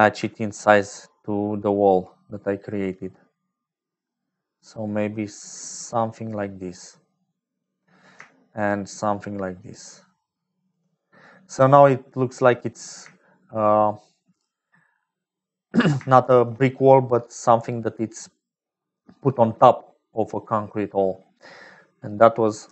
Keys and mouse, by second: 0.6-7.5 shift+drag, 8.9-10.7 shift+drag, 11.8 click, 13.0 shift+middle click, 13.6 middle click, 14.3 click, 14.4 middle click, 15.9 shift+middle click, 16.7 middle click, 18.8 click, 20.2 click, 22.1 click.